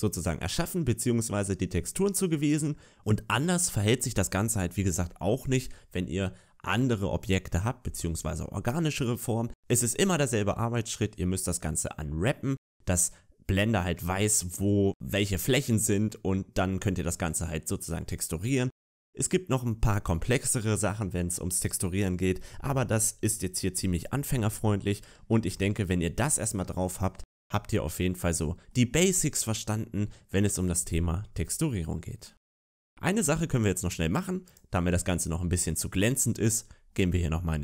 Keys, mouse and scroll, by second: 1.8 scroll down 2, 2.2 middle click, 3.0 middle click, 3.0-3.5 scroll up 3, 3.5 scroll down 3, 24.4-25.2 scroll up 2, 25.2 shift+middle click, 26.7 shift+middle click, 27.3-27.9 scroll down 1, 27.9 middle click, 27.9 scroll down 1, 30.9 middle click, 35.4 click, 35.4 scroll up 1.